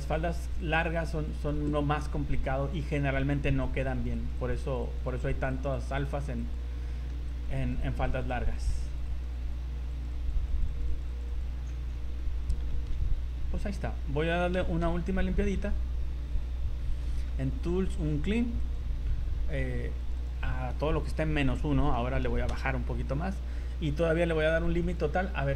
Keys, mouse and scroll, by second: 0.2 click, 0.5 click, 0.7 click, 0.9 click, 1.1 click, 1.5 click, 2.3 right click, 3.0 right click, 3.6 click, 3.9 click, 4.1 click, 4.5 click, 4.7 click, 4.9 click, 5.1 click, 5.3 click, 5.5 click, 5.7 click, 6.1 click, 6.5 click, 6.9 shift+middle click, 7.3 click, 7.7 click, 7.9 click, 8.1 click, 8.3 click, 8.5 click, 8.9 click, 9.1 click, 9.3 click, 9.9 click, 10.1 click, 10.5 click, 10.7 click, 10.9 click, 11.1 click, 11.3 click, 11.6-12.2 scroll down 10, 12.2 shift+middle click, 12.9 z, 14.5 v, 15.0 a, 15.4 a, 17.0-17.9 scroll down 12, 18.6 click, 20.0 click, 24.8 click.